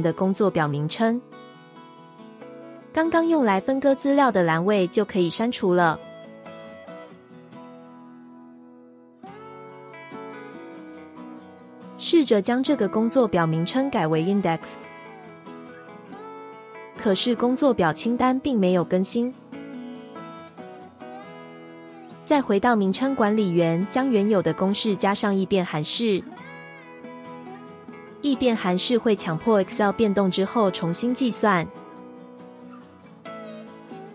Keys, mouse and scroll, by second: 27.1 typing.